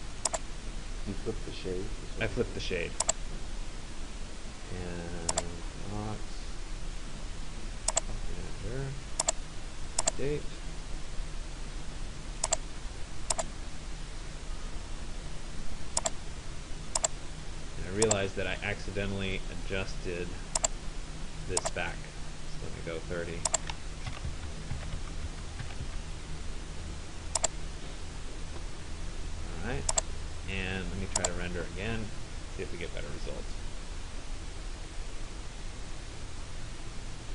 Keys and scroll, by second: 23.8-26.4 typing.